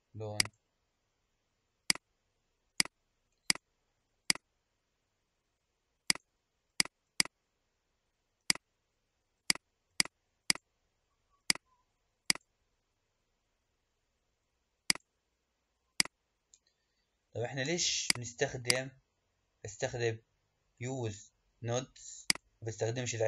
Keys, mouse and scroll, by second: 0.3-1.9 drag, 3.6 click, 4.4 click, 18.0 click, 18.8 click, 22.3 click.